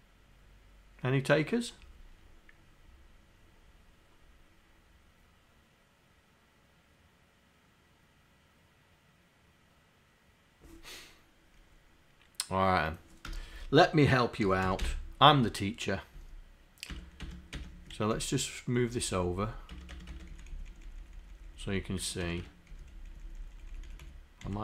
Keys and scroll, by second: 14.2-15.4 typing, 16.2 Down, 17.0 Tab, 17.2 Tab, 17.6 Tab, 17.7 Down, 18.2 Left, 18.9 Down, 19.5 Down, 19.7 Tab, 20.0 Tab, 20.1 Tab, 20.6 Down, 20.9 Down, 21.2 Down, 21.3 Down, 22.0 Tab, 22.2 Tab, 22.8 Down, 23.0 Down, 23.4 Down, 23.7 Down, 24.5 Down.